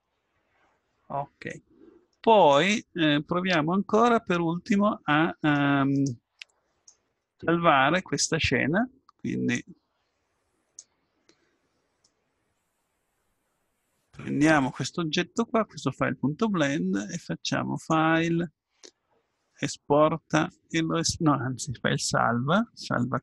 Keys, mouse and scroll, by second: 1.5-6.8 drag, 6.8-8.6 middle drag, 11.6-13.9 middle drag, 19.0-20.2 drag.